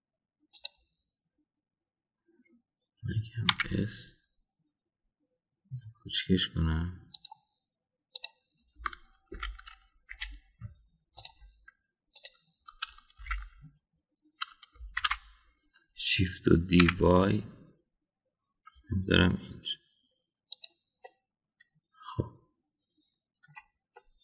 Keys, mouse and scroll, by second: 4.4 s, 10.3 ctrl+l, 11.0 Delete, 14.1 ctrl+l, 16.0 shift+d, 22.0-24.2 middle drag.